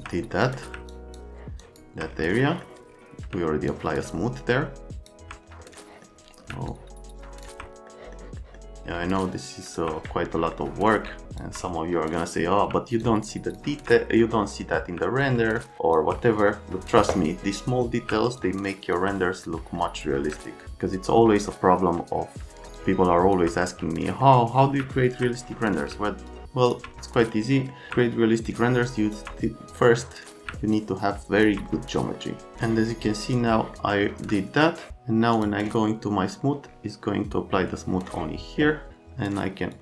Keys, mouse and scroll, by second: 0.3 right click, 0.9 alt+middle click, 1.6 alt+middle click, 2.4 right click, 3.6 alt+middle click, 5.8 scroll down 1, 6.7 alt+middle click, 7.9 scroll down 1, 8.4 right click, 9.2 alt+middle click, 10.3 right click, 11.2 alt+middle click, 11.9 right click, 13.0 alt+click, 14.2 right click, 15.2 alt+click, 16.2 right click, 17.3 right click, 18.4 alt+click, 19.5 right click, 20.5 alt+click, 21.0 right click, 22.7 alt+click, 24.0 click, 25.4 click, 26.3 alt+middle click, 27.4 click, 28.4 alt+click, 29.7 middle click, 30.7 alt+click, 31.9 middle click, 32.6 middle click, 32.7 click, 33.6 click, 34.1 F3, 39.7 click.